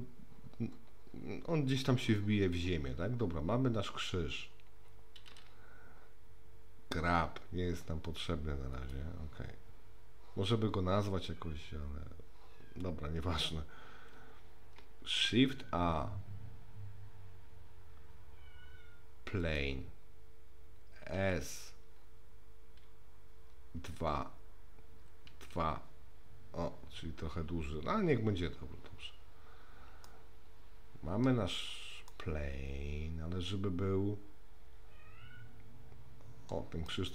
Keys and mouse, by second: 7.0 g, 15.1 shift+a, 21.2 s, 30.1-31.3 middle drag, 32.1-36.5 middle drag, 36.9 middle click.